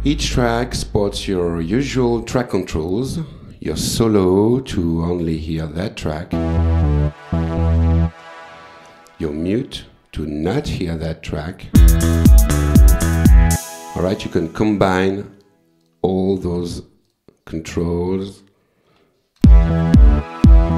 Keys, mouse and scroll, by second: 1.4 click, 4.7 click, 6.3 space, 8.1 space, 9.8 click, 10.4 click, 11.7 space, 13.6 space, 15.1 click, 15.8 click, 17.1 click, 18.2 click, 18.9 s, 19.4 space.